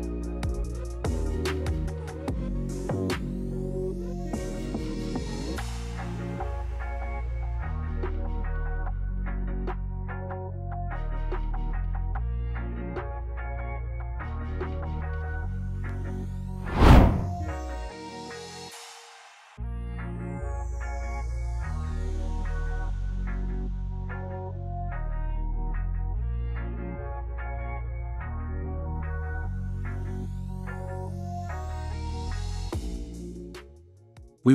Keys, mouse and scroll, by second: 16.6-18.7 drag, 19.1 click, 23.8 click, 25.2 click, 26.5-27.6 drag, 27.7 click, 29.5-30.5 drag, 31.9-32.9 drag, 33.2 click.